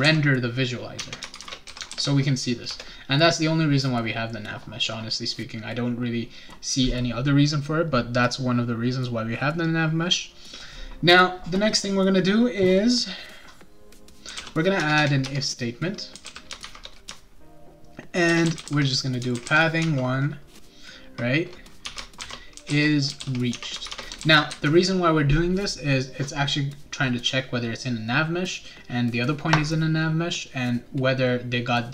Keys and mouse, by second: 0.0-2.2 typing, 1.0 Tab, 2.6 Return, 14.0-20.3 typing, 15.2 Return, 21.6-24.4 typing.